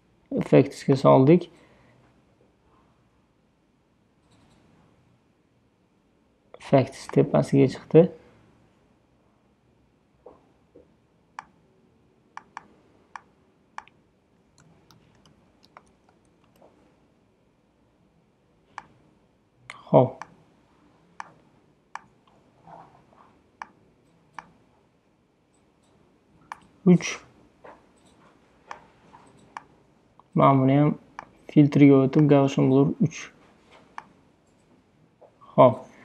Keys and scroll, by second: 14.7-16.4 typing, 16.5 Return.